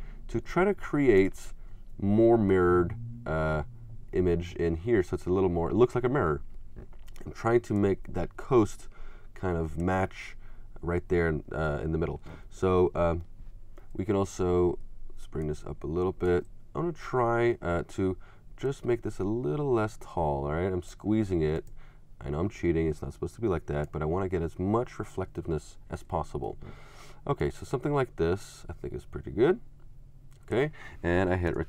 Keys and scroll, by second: 31.5 shift+super+Return.